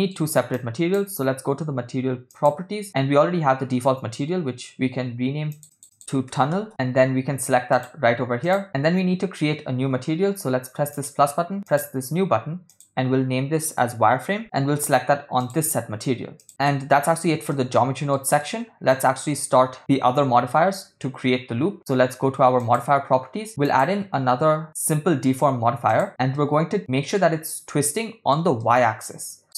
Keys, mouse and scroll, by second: 0.6 click, 2.4 click, 6.0 shift+click, 6.7 n, 7.7 click, 8.6 middle click, 10.9 click, 11.7-12.1 drag, 12.7-14.4 drag, 15.4-16.5 drag, 16.5 middle click, 17.5 ctrl+middle click, 18.4 middle click, 22.6 click, 23.7-26.1 drag, 26.4-26.8 middle drag, 27.2-28.3 ctrl+middle drag, 28.7-29.4 middle drag.